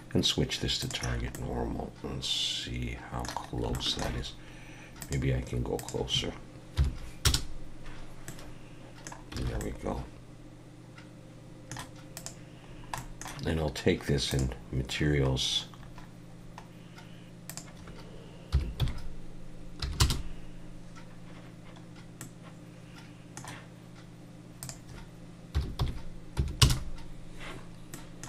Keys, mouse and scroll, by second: 1.3 middle click, 3.5 scroll up 2, 3.7 shift+middle click, 5.0 click, 8.3 middle click, 9.4 alt+a, 9.6 middle click, 12.1 click, 12.7 scroll down 2, 13.0 middle click, 14.3 click, 15.3-17.4 scroll down 9, 17.5 click, 21.9 scroll up 1, 22.2 middle click, 24.6 click, 27.9 middle click.